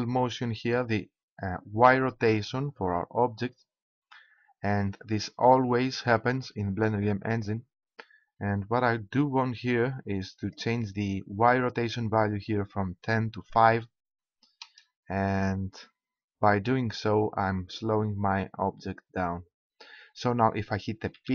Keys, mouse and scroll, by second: 21.1 p.